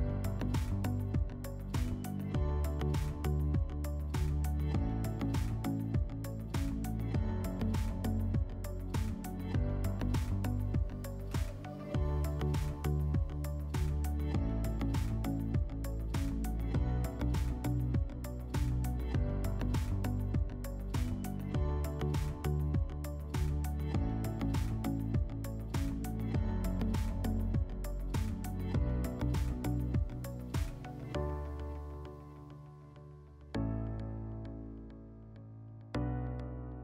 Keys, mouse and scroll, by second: 2.3 click, 2.5 click, 7.6 click, 11.0 click, 13.0 click, 13.4 click, 14.8 click, 20.4 click, 25.5 middle click, 26.9 click, 28.1 click, 31.8 ctrl+click, 33.3 click, 36.0 shift+click.